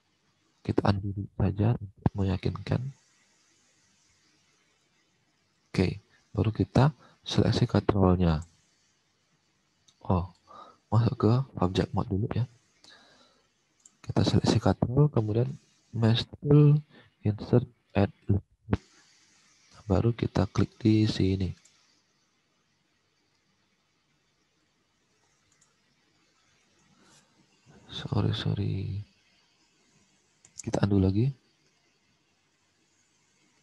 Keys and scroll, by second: 0.8 ctrl+z, 1.5 ctrl+z, 28.1 ctrl+z, 30.5 ctrl+z.